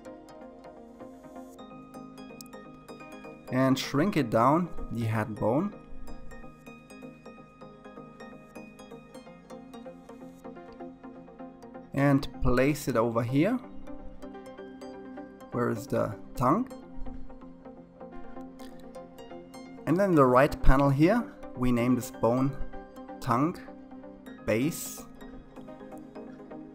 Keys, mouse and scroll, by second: 2.0 s, 6.5-8.9 scroll up 2, 8.9 g, 20.6-23.7 drag.